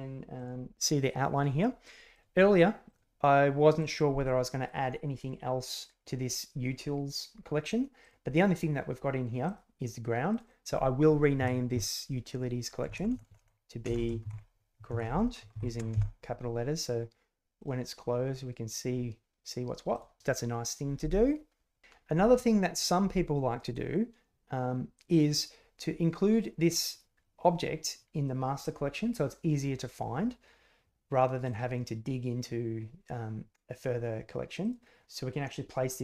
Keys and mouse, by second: 3.7 click, 10.4-16.5 drag, 13.0 BackSpace, 17.5 click, 19.9 click, 22.7 click.